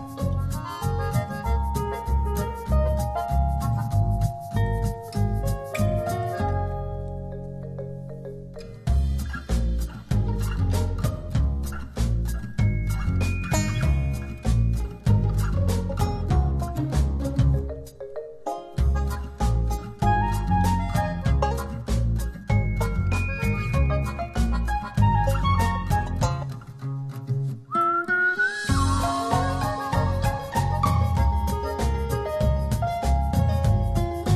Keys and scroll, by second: 32.4 alt+z, 33.1 a, 33.9 alt+a.